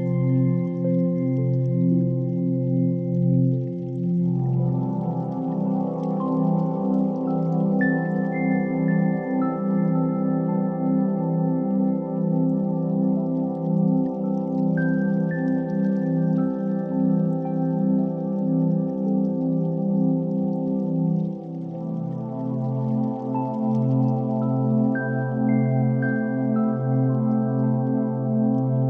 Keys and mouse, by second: 0.1 ctrl+r, 2.0 s, 5.2 alt+z, 5.6 1, 6.1 click, 7.1 s, 9.7 1, 9.9 click, 10.7 s, 14.2 click, 15.6 g, 17.1 s, 20.1 1, 20.3 click, 22.4 s, 26.7-27.7 middle drag, 28.2 KP_7, 28.6 1.